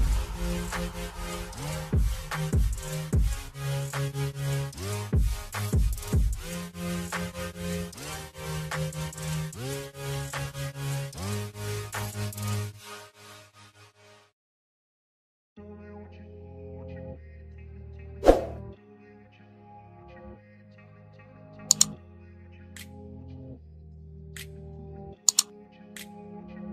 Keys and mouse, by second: 0.7 click, 2.1 Right, 2.6 Down, 3.4 Left, 3.8 click, 4.6 click, 4.9 Right, 5.3 click, 6.2 click, 6.5 Right, 6.9 Down, 7.2 click, 11.4 shift+click, 12.5 ctrl+g, 13.3-17.0 drag, 17.1 right click, 18.3 right click, 20.9 click, 22.6 click, 23.6-26.5 typing.